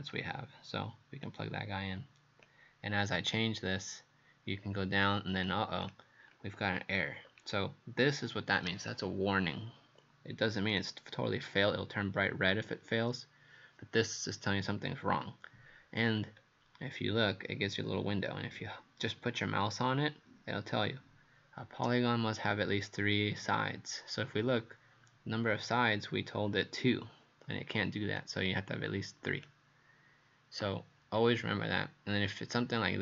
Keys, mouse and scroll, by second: 0.1 click, 7.2 scroll down 2, 10.7 click, 16.2-16.5 scroll up 2, 28.2 click.